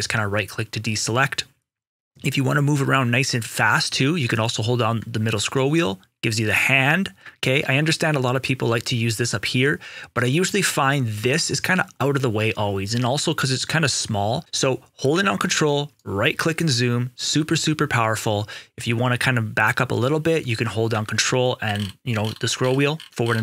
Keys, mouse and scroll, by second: 4.2 right click, 4.6 middle click, 9.0 click, 14.3 ctrl+right click, 15.9 ctrl+right click, 21.6 ctrl+scroll, 21.8 ctrl+scroll down 1, 22.5 ctrl+scroll up 1, 23.1 ctrl+scroll down 1.